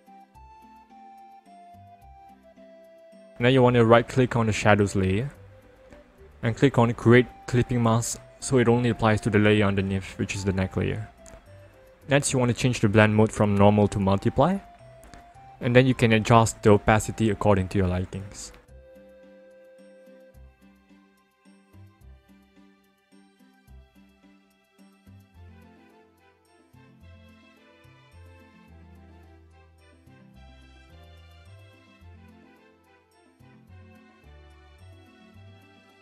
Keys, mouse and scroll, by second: 3.0 right click, 5.9 click, 9.4 click, 12.6 click, 14.6 click, 15.8 click, 26.2 ctrl+-, 30.2 click.